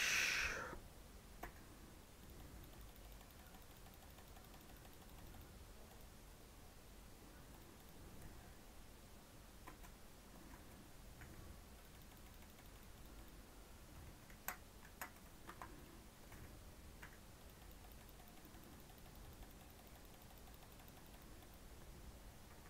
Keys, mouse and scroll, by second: 1.3 k, 11.1 k, 16.9 k.